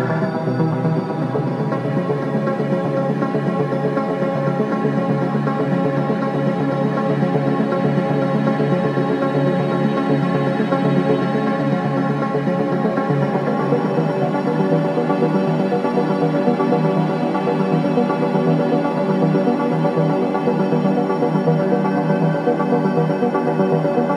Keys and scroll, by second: 0.4 ], 8.6 4, 10.1 3, 10.9 Delete, 11.4 4, 14.1 shift+i, 16.1 2, 19.0 ctrl+z, 23.1 4.